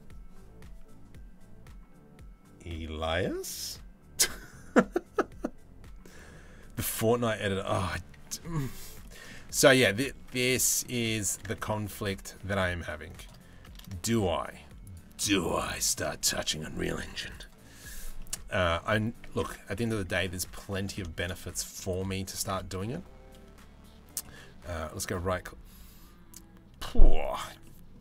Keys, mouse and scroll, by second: 8.6 middle click, 9.8 Tab, 10.0 middle click, 10.9 s, 13.6 ctrl+a, 15.3 click, 15.8 ctrl+a, 16.9 middle click, 17.8-18.1 middle drag, 18.9 Tab, 19.3 middle click, 20.3 middle click, 20.7 shift+s, 22.0 Tab, 24.3-27.0 drag, 27.2 middle click, 27.9 Tab.